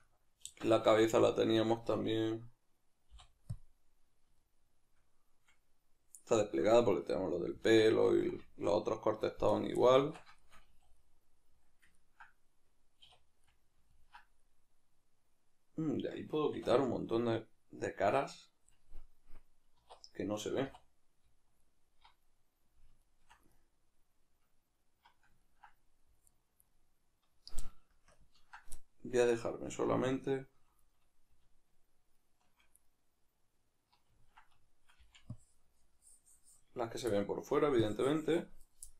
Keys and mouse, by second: 0.4 Tab, 3.1 u, 4.4-7.6 shift+middle drag, 7.6 Tab, 7.8-9.5 middle drag, 9.5 right click, 9.8-26.3 middle drag, 10.0 Tab, 10.7 a, 13.1 \, 16.5 \, 19.7 2, 21.6 alt+right click, 23.0 alt+shift+right click, 26.3 alt+right click, 26.7-28.1 middle drag, 28.1 ctrl+KP_Add, 29.1-30.1 middle drag, 30.1 alt+shift+right click, 30.3 alt+shift+right click, 30.9-32.1 middle drag, 32.1-32.8 alt+shift+right drag, 32.8-38.9 middle drag, 35.0 c, 36.9 right click, 37.5 c.